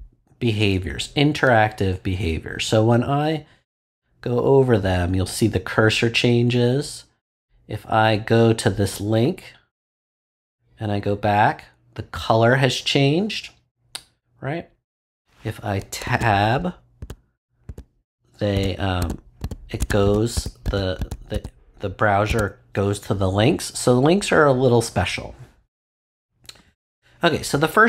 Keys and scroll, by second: 16.0 Tab.